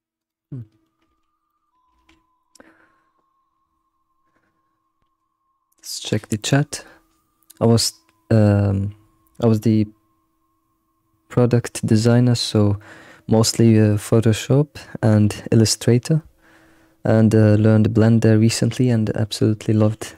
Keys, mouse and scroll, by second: 0.5 middle click, 1.2 scroll, 1.5 middle click, 1.9 ctrl+s.